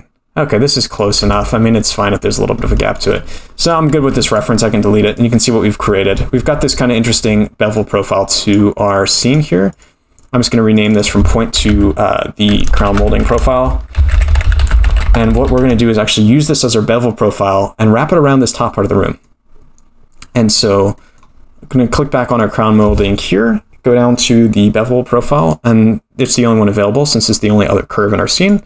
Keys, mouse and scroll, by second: 1.2 Tab, 1.4-3.6 scroll down 16, 2.8-3.1 shift+middle drag, 3.6 click, 3.9 x, 7.8-9.3 drag, 9.7 click, 10.7 click, 10.9-16.4 drag, 18.8-19.2 scroll down 5, 19.2-20.5 middle drag, 20.5-20.9 scroll up 3, 21.0-22.1 middle drag, 22.3 click, 23.4-25.3 scroll down 8, 25.3-25.9 scroll down 1, 25.9 click.